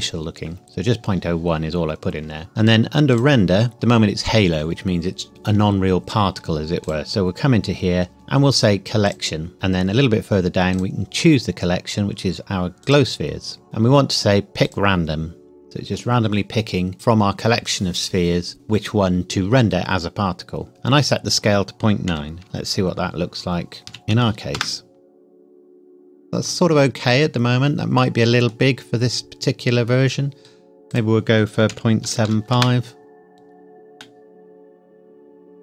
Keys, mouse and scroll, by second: 2.5-2.9 scroll down 1, 3.1 click, 3.7-4.9 scroll down 1, 6.8 click, 9.0 click, 9.5 scroll down 1, 10.7 click, 14.6 click, 21.2 click, 22.0 KP_Decimal, 22.4 KP_9, 24.1 KP_9, 24.5 KP_Enter, 26.8 scroll down 1, 28.0 middle click, 28.8 scroll up 1, 30.9 click, 31.7 KP_Decimal, 32.0 KP_7, 32.4 KP_5, 32.5 KP_Enter, 34.0 middle click.